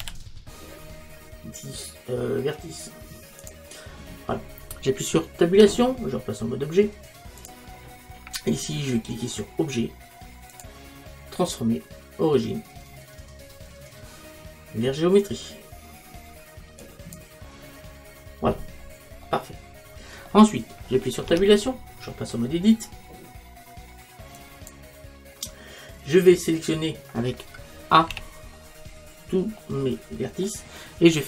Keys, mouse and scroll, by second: 0.1 x, 5.6 Tab, 19.3-21.3 middle drag, 21.3 Tab, 28.2 a, 29.7-31.2 middle drag.